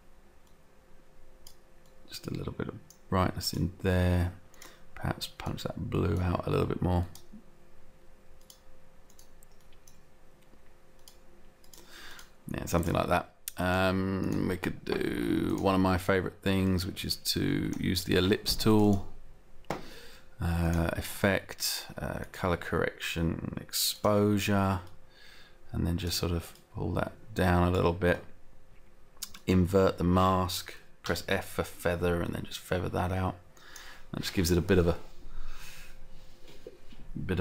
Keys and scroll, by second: 31.1 f, 33.1 f.